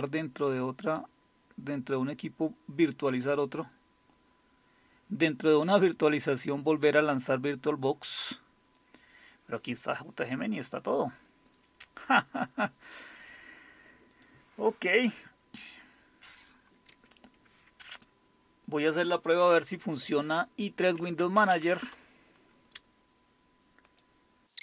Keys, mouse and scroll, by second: 0.4 click, 14.1 click, 16.9 Escape, 17.9 click, 20.9-22.0 typing, 23.9 click, 24.5 click, 24.5 typing.